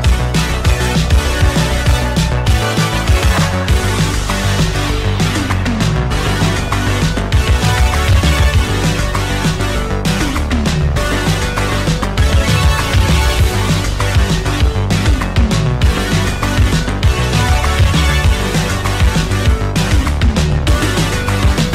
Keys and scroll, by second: 0.7 ctrl+z, 4.5 q, 13.4 q, 15.9 w, 16.2 space, 17.4 ctrl+c, 17.7 -, 18.6 ctrl+v, 18.7 Return.